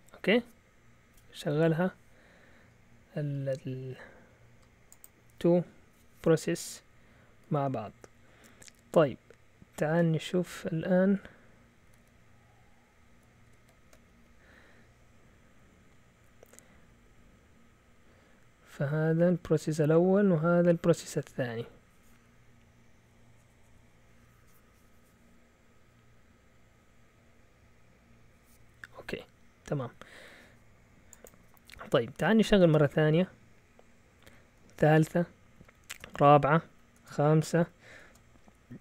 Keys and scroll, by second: 11.8 ctrl+a, 12.0 ctrl+a, 13.5 ctrl+w, 13.6 ctrl+w, 14.1 Down, 14.2-15.2 Down, 19.3 Up, 19.7 Down, 20.1 Down, 20.2 Down, 20.4 Down, 20.5 Down, 20.8 typing, 32.6 typing, 34.2-34.7 typing, 35.5 Up, 35.9 Return, 36.6 Up, 37.0 Return, 37.6 Up, 38.0-38.8 typing.